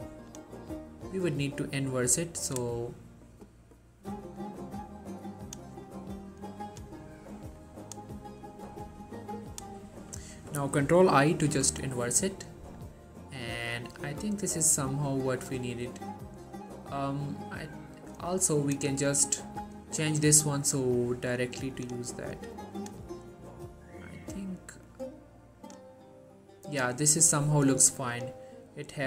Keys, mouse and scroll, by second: 11.4 ctrl+i, 14.7-15.7 drag, 21.1-22.0 drag, 25.0-25.9 drag.